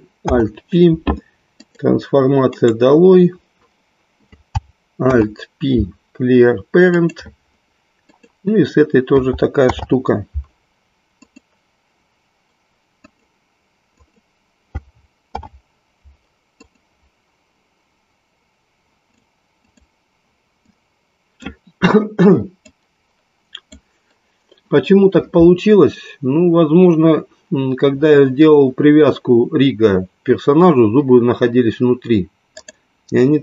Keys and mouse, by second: 1.6 alt+p, 2.6 right click, 5.0 alt+p, 8.0 click, 9.5 alt+p, 12.8 click, 15.2 alt+p, 21.2 click, 22.6-23.8 drag, 32.5-33.4 drag.